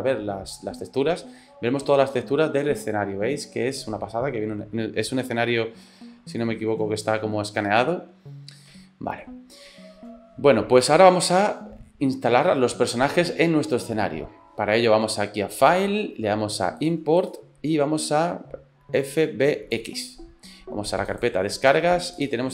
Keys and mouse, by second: 1.9 middle click, 2.8 click, 3.4-5.7 middle drag, 6.4 shift+middle click, 7.1 shift+middle click, 7.8 ctrl+middle click, 8.8 shift+middle click, 15.6-20.1 drag.